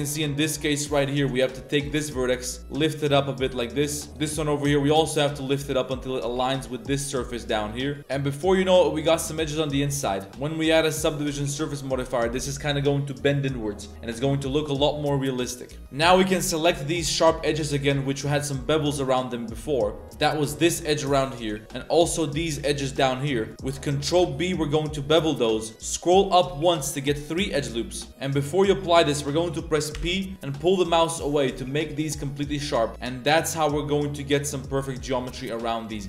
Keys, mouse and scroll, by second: 1.8 right click, 2.0-2.4 middle drag, 2.6 g, 4.2 middle click, 4.8 g, 6.3 z, 6.5-9.0 middle drag, 9.4 middle click, 9.7 Tab, 10.0 middle drag, 10.4 Tab, 10.7-11.5 middle drag, 11.7 Tab, 11.7 middle drag, 15.0-15.8 middle drag, 15.8 Tab, 16.1 2, 16.5 alt+click, 17.0 z, 17.5-17.9 middle drag, 17.9 z, 18.1 shift+middle drag, 18.4 middle drag, 19.0-20.1 middle drag, 20.2 a, 20.3 a, 21.1 z, 21.4 middle click, 21.6 z, 23.4 shift+click, 24.0 ctrl+b, 28.1 ctrl+z, 28.1 b, 32.2-32.7 middle drag, 32.9 Tab, 32.9-33.4 middle drag, 33.7-35.0 middle drag, 35.1 a, 35.3 a, 35.4-35.8 middle drag.